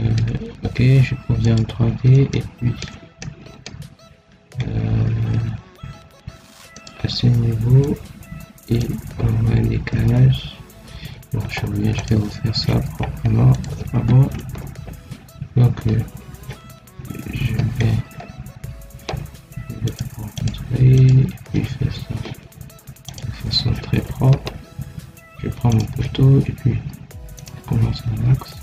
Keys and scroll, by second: 4.9 Escape, 9.8 Escape, 14.2 ctrl+x.